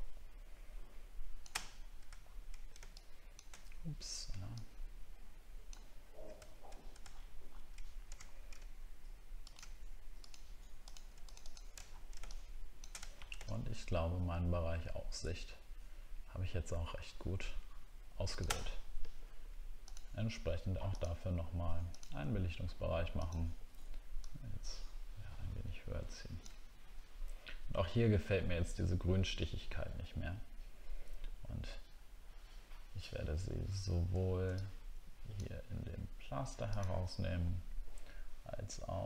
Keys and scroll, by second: 2.1 alt+scroll down 1, 6.5-7.0 alt+scroll down 1, 8.2-8.5 alt+scroll up 1, 11.8 alt+scroll down 1, 13.1 alt+scroll down 5.